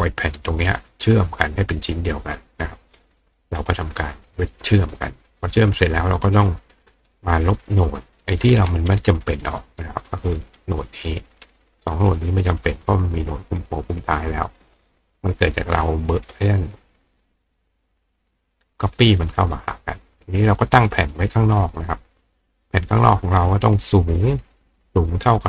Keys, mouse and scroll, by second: 4.4 click, 5.3 click, 5.9 click, 7.0 click, 7.7 click, 9.6 click, 10.3-10.8 drag, 12.8-13.3 drag, 14.1 click, 15.2 click, 17.2 click, 19.3-22.0 drag, 23.4-25.4 drag.